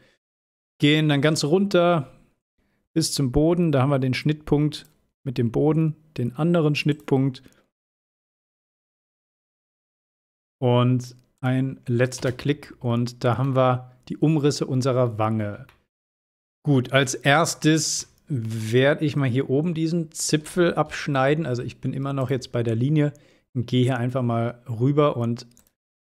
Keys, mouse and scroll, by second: 0.8-1.5 shift+middle click, 1.8 scroll up 1, 4.9 click, 7.4 scroll down 1, 8.2-9.1 shift+middle drag, 9.8-11.2 scroll up 1, 11.5 click, 12.3 space, 12.6 scroll down 1, 13.5-14.5 middle drag, 14.9 scroll down 1, 15.8-16.4 shift+middle drag, 17.1-18.0 middle drag, 18.8-21.0 scroll up 1, 21.0 l, 22.3 click, 24.8 scroll up 1, 25.7 click.